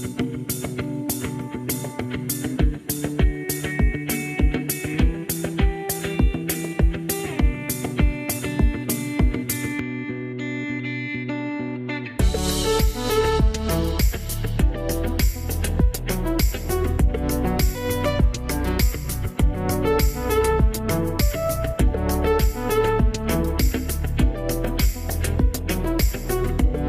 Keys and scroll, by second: 12.0 2, 12.1 Return.